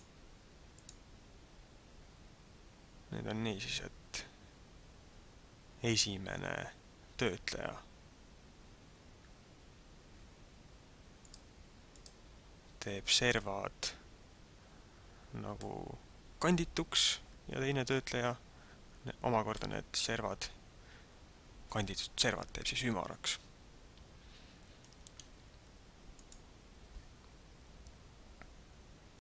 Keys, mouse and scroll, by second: 0.8 click, 9.6-10.0 scroll up 2, 11.3 click, 11.9 click, 15.7 middle click, 19.5 middle click, 26.2 click.